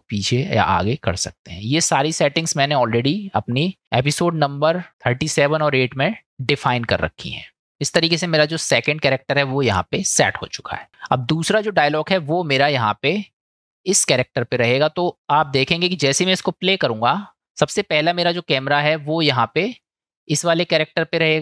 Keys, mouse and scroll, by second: 15.2-16.3 drag, 19.5 click.